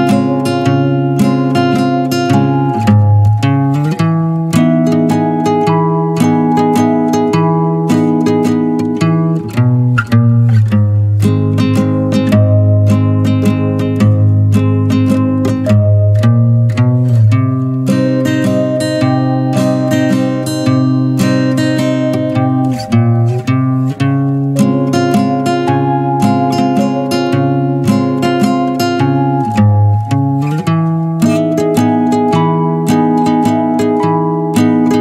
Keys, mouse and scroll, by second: 0.1-0.7 middle drag, 0.7 click, 0.9 shift+middle drag, 1.2 click, 1.4 middle click, 1.6 shift+click, 1.9 shift+click, 2.2-4.0 middle drag, 4.0 n, 4.5 click, 4.7 click, 5.2-6.8 middle drag, 6.8 ctrl+z, 7.3 click, 7.6 click, 7.7 scroll down 2, 7.9-9.3 middle drag, 9.3 click, 9.7-11.2 middle drag, 11.2 shift+click, 11.3 shift+click, 11.5 middle click, 11.7 e, 12.4 middle click, 13.3 Tab, 13.4 click, 13.6 shift+middle click, 13.6 shift+scroll up 1, 13.8 middle click, 13.9 Tab, 14.1 middle click, 14.5 Tab, 15.0-18.4 middle drag, 18.4 click, 18.9 click, 19.3 scroll down 2, 19.4 middle drag, 19.7-20.0 scroll up 3, 20.1-20.6 middle drag, 20.6 click, 20.7 click, 21.0 click, 21.4 scroll down 1, 21.5-22.8 middle drag, 22.8 click, 23.7 Tab, 23.8 middle click, 24.0 Tab, 24.1 click, 24.2 middle click, 24.4 l, 25.1 g, 25.8 middle click, 25.9 g, 28.0 middle click, 28.2 click, 28.2 Tab, 28.3 middle click, 29.1 click, 29.4 middle click, 29.5 Tab, 29.7 middle click, 30.9 3, 30.9 click, 31.3 middle click, 31.5 e, 32.1 alt+s, 32.4-33.5 middle drag, 33.5 ctrl+z, 33.6 middle click, 33.7 Tab, 33.8 click, 33.9 scroll down 1, 33.9 middle click, 34.1 scroll up 1, 34.2 Tab, 34.3 middle click.